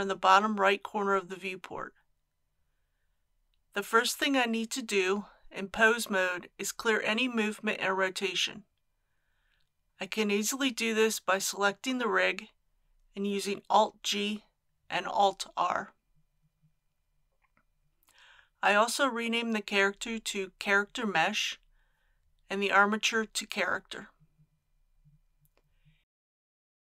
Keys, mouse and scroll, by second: 3.8 click, 13.5 a, 15.5 alt+g, 16.8 r, 20.9 click, 23.8-24.5 typing, 24.9 Return.